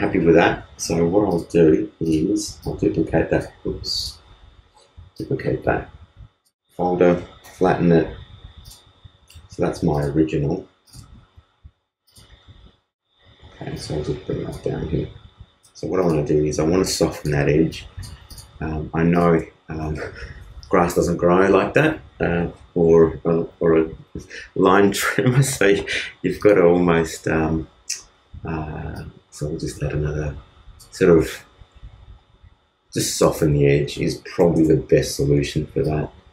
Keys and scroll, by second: 7.4 super+e.